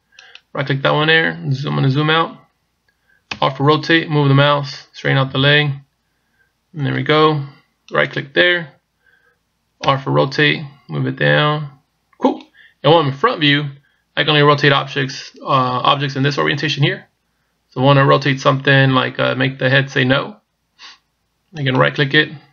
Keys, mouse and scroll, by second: 0.3 right click, 1.4-2.1 scroll down 2, 3.3 r, 8.0 right click, 9.9 r, 21.7 right click.